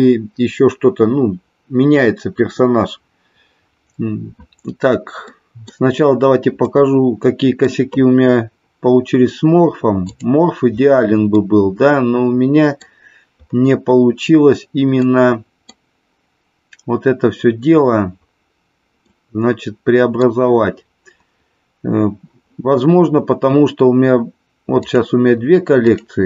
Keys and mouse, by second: 5.3 middle click, 6.8-7.7 middle drag, 9.9 click, 11.4-12.9 middle drag, 15.1 middle click, 19.1-20.3 middle drag, 24.8 click, 25.9 click.